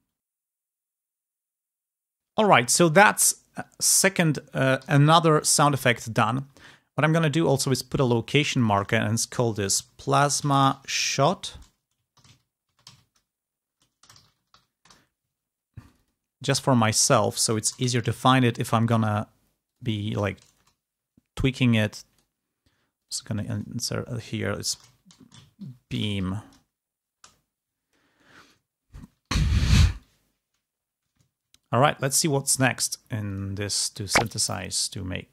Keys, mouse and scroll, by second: 0.0 click, 0.3-1.8 typing, 1.4 click, 1.6 click, 1.7 click, 1.9 Return, 2.1 click, 4.7 g, 5.1 ctrl+scroll down 2, 5.7-6.1 ctrl+scroll up 2, 6.2 ctrl+scroll down 2, 6.6 ctrl+scroll up 2, 7.9 ctrl+click, 8.4 ctrl+click, 9.2-14.9 typing, 15.7 click, 16.6 click, 17.4 Left, 17.5 BackSpace, 17.7 l, 17.9 Right, 19.5 click, 19.9 space, 20.5 Return, 21.3 click, 22.8 ctrl+click, 23.2 ctrl+click, 24.3-26.6 typing, 27.0 Return, 28.5 ctrl+scroll down 2, 29.3 ctrl+scroll down 2, 31.1 ctrl+scroll down 2, 31.5 ctrl+click, 32.4-32.8 ctrl+scroll up 2, 33.2 ctrl+click, 33.8 space.